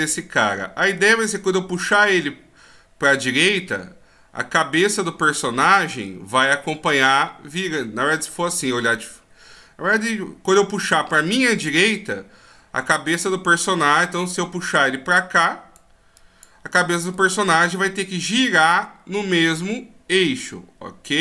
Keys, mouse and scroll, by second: 5.6 middle click, 7.8 middle click, 14.7 d, 14.9 click.